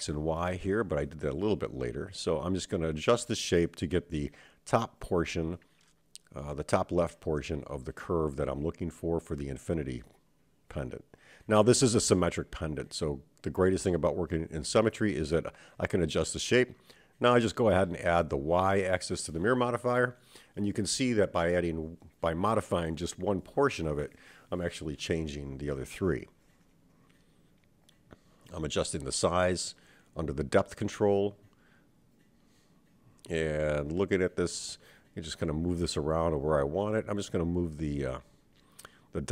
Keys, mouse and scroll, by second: 0.2 g, 2.7 click, 3.1 g, 5.5 click, 5.7 g, 7.0 click, 7.6 g, 9.9 e, 11.9 e, 13.7 e, 14.7 a, 15.5 click, 24.9 click, 26.7-31.3 drag, 32.4 KP_1, 33.6 click, 34.7 Tab, 35.2-37.0 drag, 37.6-39.3 drag.